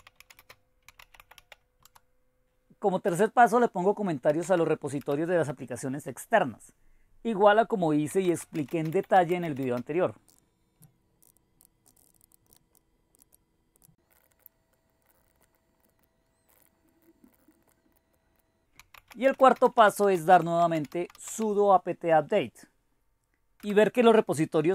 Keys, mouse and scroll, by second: 0.0-1.9 typing, 3.1-5.0 typing, 7.9-12.7 typing, 11.2 Down, 11.3 Down, 11.3-11.8 Right, 12.7 Down, 13.1 ctrl+o, 13.3 Return, 13.8 ctrl+x, 14.0-21.8 typing, 14.8 Right, 15.0 Right, 15.0 Left, 15.1 Delete, 15.4 Right, 15.5 Down, 15.8 ctrl+o, 16.0 Return, 16.0 ctrl+x, 18.4 ctrl+x, 23.4-24.2 typing.